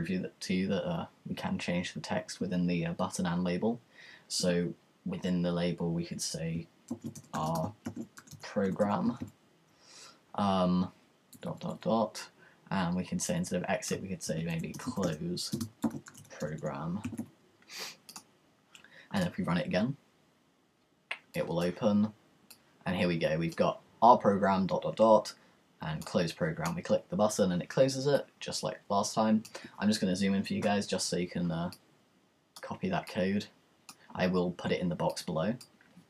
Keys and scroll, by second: 6.6-9.7 typing, 14.0-18.2 typing.